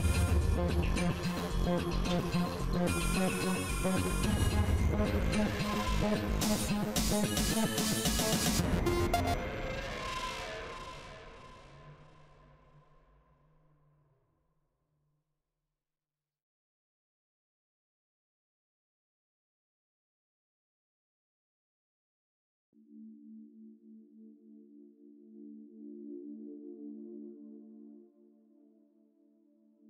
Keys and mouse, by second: 0.3 KP_3, 2.0 ctrl+s, 3.3 g, 4.5 g, 5.5 ctrl+s, 8.3 KP_3, 11.4-13.4 drag, 11.6 g, 13.5 KP_1, 14.8 click, 15.0 g, 17.6-19.4 drag, 17.8 g, 19.4 KP_3, 20.3 g, 21.8 ctrl+z, 22.5 g, 23.9-25.8 drag, 23.9 g, 25.0 KP_1, 27.9 KP_3, 28.9-29.8 drag, 29.2 g.